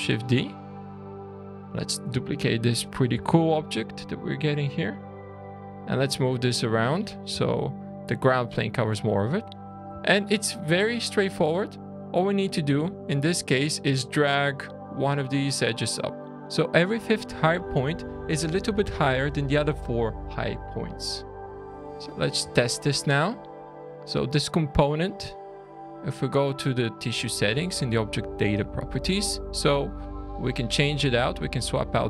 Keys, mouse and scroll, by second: 0.0 `, 1.3 click, 2.4 shift+click, 2.5 middle click, 3.6 shift+d, 4.8 click, 6.2 click, 7.4 shift+middle click, 8.1 shift+scroll down 1, 8.4-8.7 scroll up 6, 9.0 click, 9.5 Tab, 10.0 shift+middle click, 10.6 shift+scroll down 1, 10.7 alt+a, 11.1 scroll up 3, 11.8 click, 12.6 alt+a, 12.9 2, 13.2 click, 13.9 click, 14.9 click, 16.2 middle click, 16.2-16.9 scroll down 4, 16.9-18.4 scroll up 2, 20.9 middle click, 21.7 click, 22.1 scroll down 2, 22.5 shift+middle click, 26.9 click.